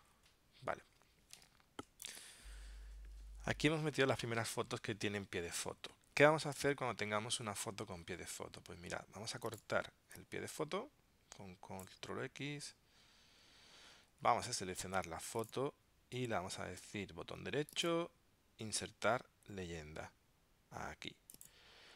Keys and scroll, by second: 2.2 ctrl+alt+super+p, 13.0 super+x.